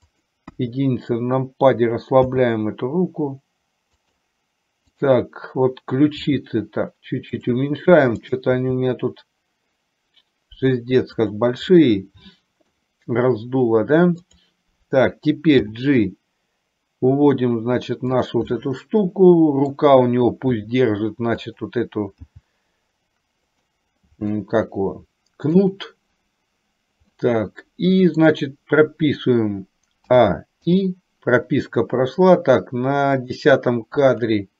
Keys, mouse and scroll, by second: 0.6 KP_1, 2.6 g, 5.1 click, 6.3 g, 8.3 click, 8.9 g, 11.8-12.8 middle drag, 14.4 click, 15.8 g, 18.7 scroll up 1, 18.8-19.8 middle drag, 19.8 scroll down 1, 20.7 r, 22.4 g, 24.4-25.7 middle drag, 27.3-28.4 middle drag, 30.3 a, 30.9 i, 33.6 click.